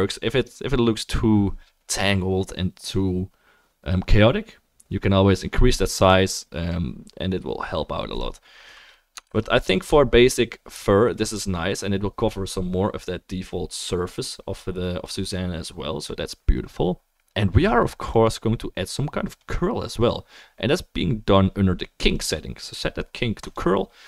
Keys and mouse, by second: 0.6-24.0 middle drag, 0.6-9.8 right drag, 9.4 ctrl+z, 10.2-20.2 drag, 10.2-24.0 right drag, 22.2-24.0 drag.